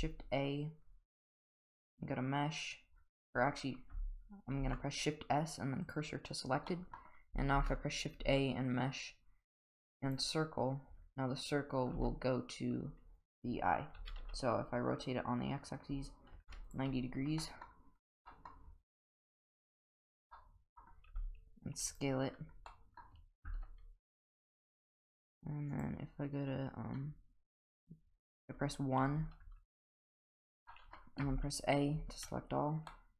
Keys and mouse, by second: 4.6 shift+s, 6.7 middle drag, 7.5 shift+a, 12.0 s, 14.0 r, 17.4 middle drag, 18.3 middle click, 19.8 click, 20.3-20.8 middle drag, 21.1 s, 22.7 middle click, 23.4 Tab, 25.7 click, 29.1 2, 29.4 3, 30.0 1, 30.7 middle click, 31.2 a, 31.9 a, 32.9 middle click.